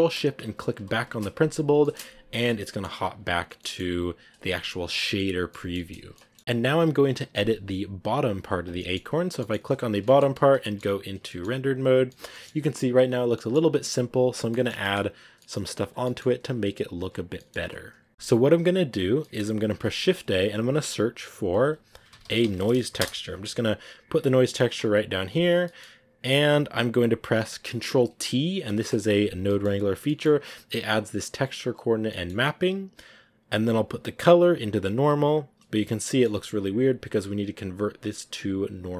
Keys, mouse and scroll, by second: 0.7 ctrl+shift+click, 1.9 shift+middle click, 2.2 scroll down 2, 2.3 middle click, 2.8 scroll up 2, 2.9 a, 3.5 middle click, 4.2 a, 5.2 scroll down 1, 5.4-8.3 middle drag, 8.3 right click, 8.7 middle click, 9.2 scroll up 1, 10.6-16.4 shift+middle drag, 17.9-22.9 middle drag, 27.0 click, 28.6 ctrl+t, 29.7-31.6 middle drag, 31.6 click, 33.7-35.0 drag, 36.1 middle click, 36.6 scroll down 1.